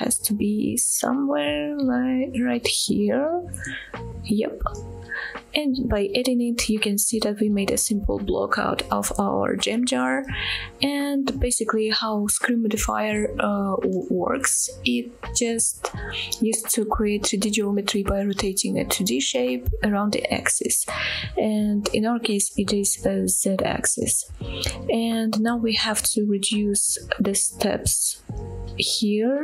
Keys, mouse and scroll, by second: 5.7-6.2 scroll down 2, 6.2-6.8 middle drag, 7.0-7.4 scroll up 1, 7.7-8.3 shift+middle drag, 8.7-10.0 middle drag, 10.3-11.1 middle drag, 11.3-12.1 scroll up 1, 23.9-24.3 middle drag, 26.5-29.4 drag.